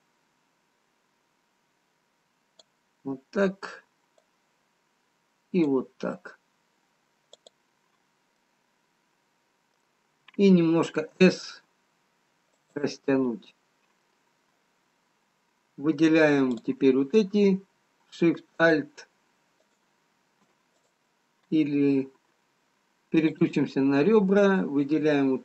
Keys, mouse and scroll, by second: 0.5 click, 4.4 click, 8.7 middle click, 11.3 s, 16.5 click, 18.8 alt+shift+click, 19.7 alt+shift+click, 20.8 click, 23.4 click, 25.1 click.